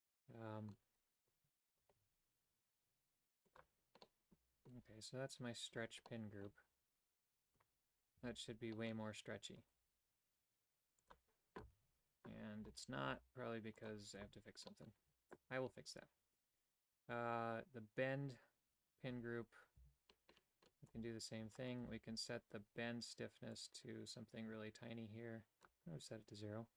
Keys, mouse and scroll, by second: 1.8 ctrl+Tab, 4.0 middle click, 6.1 middle click, 7.5 Tab, 8.2 a, 8.7 middle click, 9.6 right click, 9.8 g, 11.7 a, 13.1 g, 14.2 a, 14.7 middle click, 19.8 c, 23.5-25.7 drag.